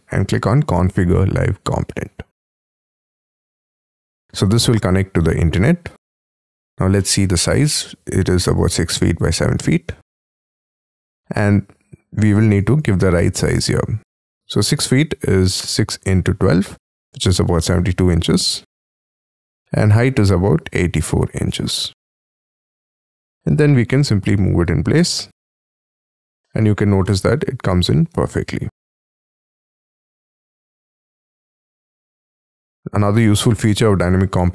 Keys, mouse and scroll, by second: 6.1 scroll up 3, 6.3 middle click, 6.4 scroll down 1, 7.1 middle click, 7.3 t, 9.8 space, 10.2 middle click, 10.7 middle click, 12.7 double click, 17.6 typing, 18.2 Tab, 19.0 Tab, 20.7-21.6 typing, 22.8 middle click, 23.5 m, 23.5-24.1 scroll up 11, 25.8-26.2 scroll down 6, 26.2 middle click, 26.6 shift+scroll down 6, 27.0 shift+middle click, 28.1 space, 28.7 middle click, 30.1 scroll down 2, 30.5 middle click, 33.1 scroll up 3, 33.4 middle click, 34.0 right click.